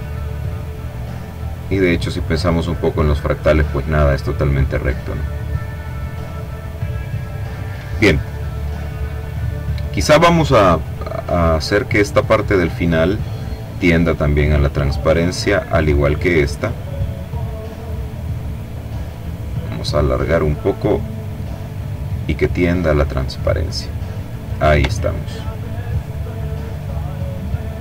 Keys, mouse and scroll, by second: 2.1-4.3 drag, 5.3-7.0 drag, 9.2 click, 11.7 click, 13.3-14.9 drag, 15.2 click, 17.7-20.3 drag, 21.1-23.1 drag, 23.7 click, 24.5-25.4 ctrl+scroll down 2, 25.4-25.8 ctrl+scroll down 1, 25.9-27.4 ctrl+middle drag, 27.4-27.8 ctrl+scroll up 3.